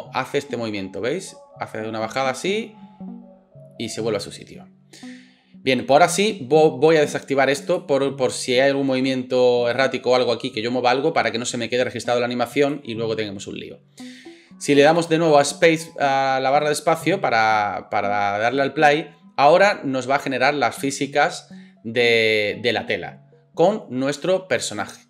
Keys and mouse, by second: 7.8-12.7 middle drag, 12.7-25.0 drag, 14.9 space.